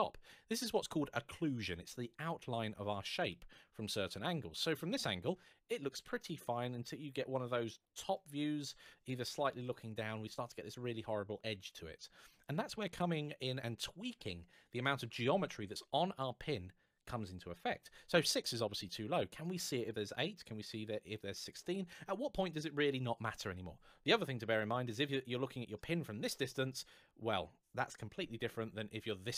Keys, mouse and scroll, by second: 3.1 middle click, 23.8-24.2 scroll down 1, 24.6 scroll up 1, 24.7 middle click, 28.2-29.1 scroll up 1, 29.1 middle click.